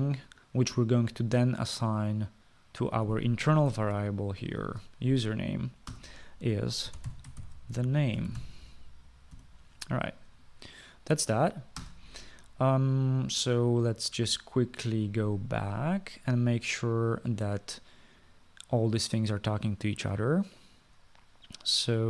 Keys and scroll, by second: 4.7 ctrl+c, 5.6 ctrl+v, 6.9-10.3 typing, 12.8 ctrl+s.